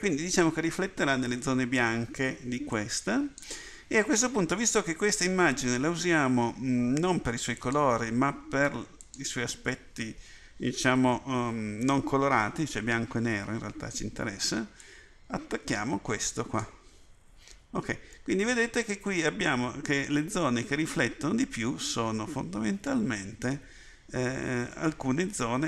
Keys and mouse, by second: 25.1 middle click.